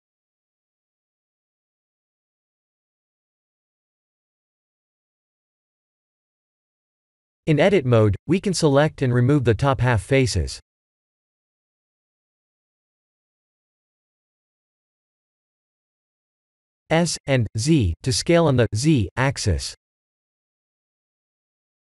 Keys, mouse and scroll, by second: 1.3-1.7 scroll up 6, 1.9 Tab, 2.5-3.2 scroll up 3, 5.0 click, 5.3 b, 8.1 3, 9.3 b, 12.8 x, 15.7 Tab, 16.4 shift+middle click, 17.5 s, 19.7-20.5 scroll down 6, 20.8 s.